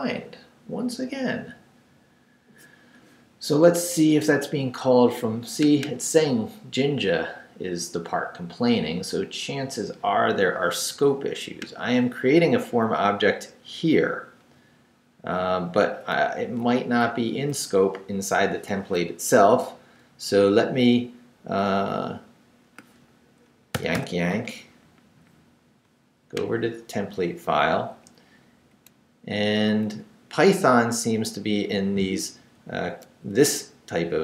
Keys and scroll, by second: 12.9 Down, 13.5 Up, 14.5 Left, 16.2 Down, 16.6 Up, 17.1 Down, 17.5 Up, 23.7 y, 27.6 Up, 30.9 Left, 32.5 Right, 33.1 Left.